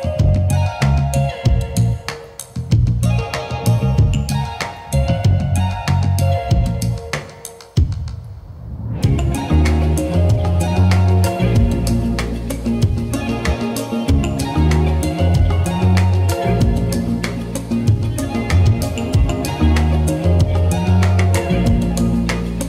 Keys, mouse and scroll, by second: 0.0-1.4 middle drag, 1.9-2.9 drag, 3.9-5.0 drag, 5.4-6.2 typing, 6.2 click, 8.9 click, 9.0-10.3 ctrl+drag, 10.9 click, 11.7-13.0 drag, 13.9-15.3 middle drag, 18.9 KP_1, 19.9 KP_5, 21.0 middle click.